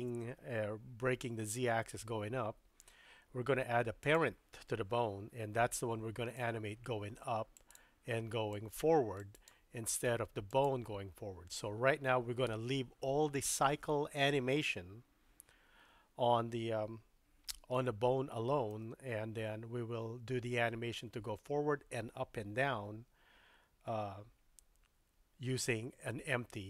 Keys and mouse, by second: 4.0 click, 6.3-7.8 drag, 8.6 click, 10.5 click, 17.7-18.8 shift+middle drag.